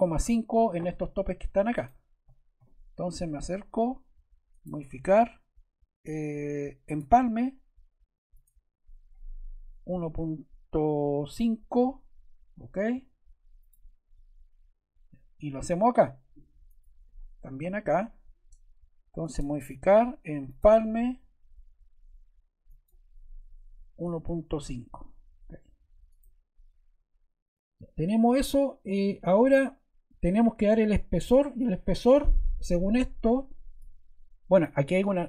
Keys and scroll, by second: 9.3-10.3 typing, 11.6 5, 23.5-24.8 typing.